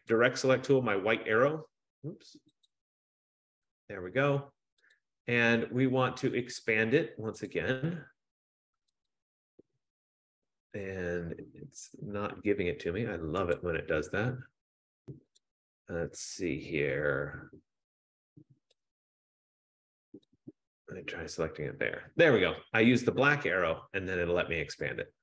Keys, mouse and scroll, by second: 2.8 click, 5.1 click, 5.5 F15, 7.6 click, 9.3 click, 13.6 click, 15.7 right click, 19.1 click, 20.6 click, 21.2 click.